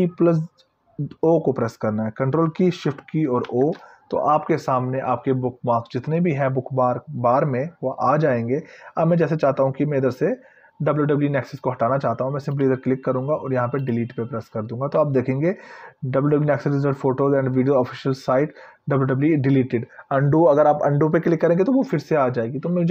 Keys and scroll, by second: 3.7 ctrl+shift+o.